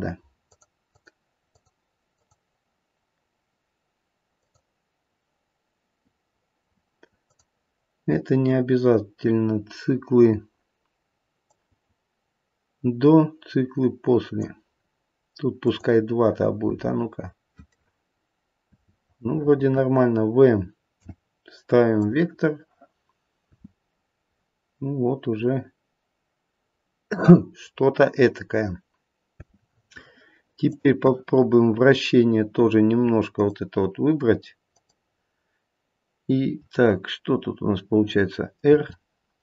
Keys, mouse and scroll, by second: 0.4 click, 0.8 click, 1.5 click, 2.1 click, 4.3 click, 7.2 click, 11.5 click, 15.6 click, 16.6 space, 19.2 space, 20.9 v, 23.4 space, 29.4 space, 30.6 click, 33.2 click, 34.7 click, 38.7 r.